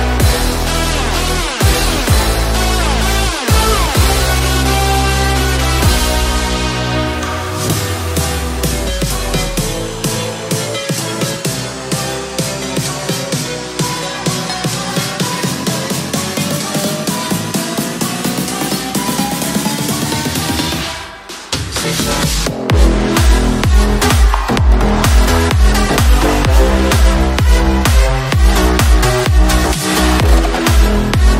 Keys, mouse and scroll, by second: 0.0 click, 0.3 click, 0.7 click, 1.1 click, 1.8 click, 2.1 click, 2.9 click, 4.9 click, 5.9 s, 7.1 shift+click, 7.9 s, 9.7 s, 11.6 g, 13.1 r, 14.5 click, 15.5 r, 17.1 click, 18.9 click, 19.5 click, 20.3 click, 24.2 click, 27.1 click, 27.5 typing, 28.5 click, 30.3 click.